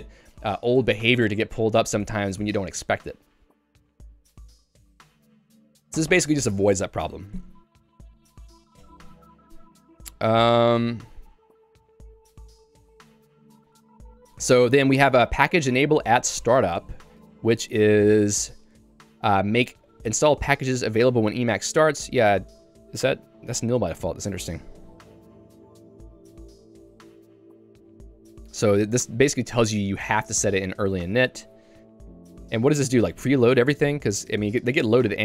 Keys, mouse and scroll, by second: 14.6 Escape, 15.0 j, 17.6 Return, 18.3 j, 28.6-30.4 typing, 32.2 Escape.